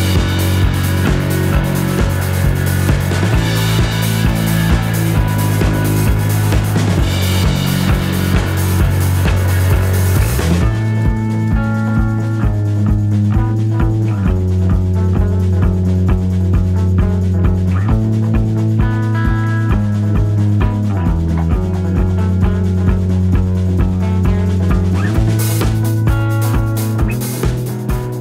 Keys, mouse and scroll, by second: 5.5-7.4 shift+drag, 8.0 ctrl+z, 9.0 shift+click, 9.9 ctrl+shift+z, 10.5-12.2 ctrl+shift+drag, 16.8 shift+click, 21.8-24.0 drag, 24.8-26.3 shift+drag, 27.9 click.